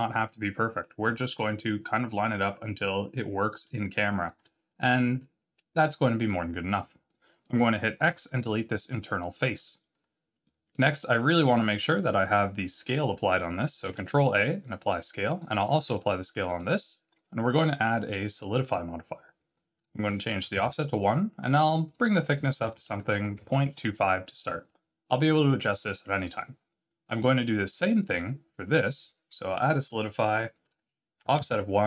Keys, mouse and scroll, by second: 0.0-1.0 scroll up 2, 1.0 s, 4.7 middle click, 5.1-5.5 scroll up 5, 6.3-7.2 scroll down 12, 7.0 middle click, 8.0 x, 9.8 scroll down 2, 10.4 middle click, 10.9 scroll down 2, 11.4 Tab, 13.8 ctrl+a, 15.2 click, 15.7 ctrl+a, 17.4 click, 19.7 click, 21.8 click, 27.7 click, 28.7 click, 30.6 click.